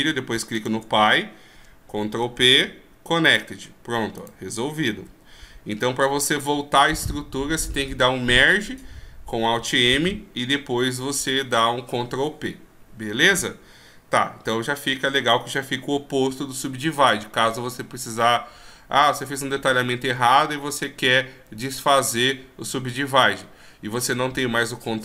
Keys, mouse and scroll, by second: 0.8 shift+right click, 2.7 ctrl+p, 4.5 right click, 5.2 g, 14.0 scroll down 1, 14.6 scroll down 3, 17.5 shift+scroll up 4.